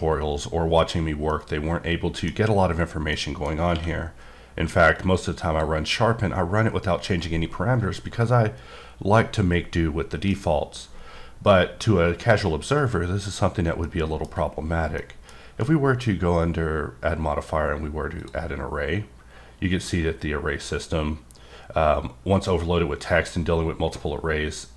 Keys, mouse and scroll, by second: 1.3 middle click, 3.1 middle click, 4.9 click, 13.8 click, 14.1 middle click, 14.7 scroll down 1, 15.0 middle click, 15.4 q, 18.2 click, 19.4-20.4 scroll up 2.